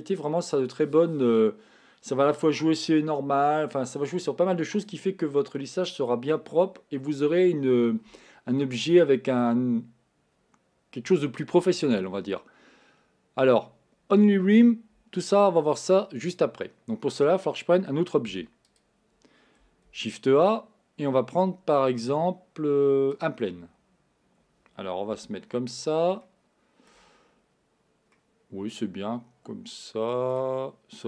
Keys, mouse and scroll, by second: 18.3 x, 19.9 shift+a, 25.1 KP_1, 26.3-31.0 shift+middle drag.